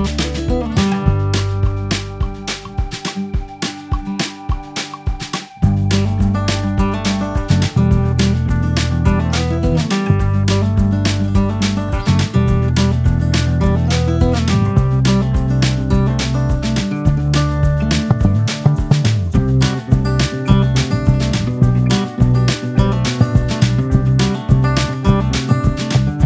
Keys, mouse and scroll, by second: 2.8 drag, 6.4-8.4 drag, 10.7-11.0 scroll down 10, 11.0 click, 11.5 ctrl+x, 11.9-14.4 ctrl+z, 15.0 ctrl+shift+z, 15.8-16.9 drag, 16.9 BackSpace, 18.1 o, 18.7 t, 19.9 click, 20.5 BackSpace, 20.6 BackSpace, 21.8 click, 22.0 x, 22.2 ctrl+v, 22.8 shift+a, 24.7 click, 25.2 click, 25.9 click.